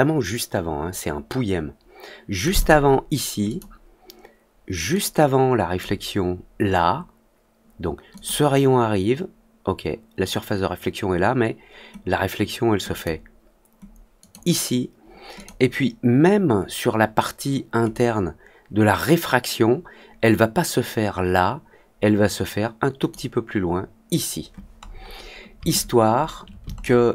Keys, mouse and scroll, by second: 2.4 click, 3.4 click, 4.9 click, 8.1 click, 12.9 click, 14.1 click, 15.3 click, 17.8-23.0 drag, 24.8 click.